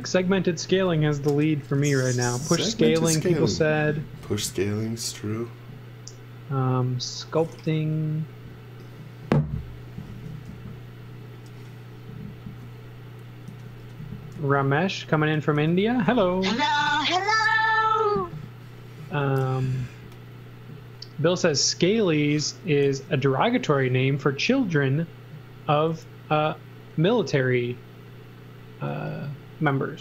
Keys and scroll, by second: 0.0 z, 0.4 x, 13.4 z, 13.8 x, 14.3 z, 15.5 z, 16.8 p, 18.4 z, 19.2 x, 22.9 z.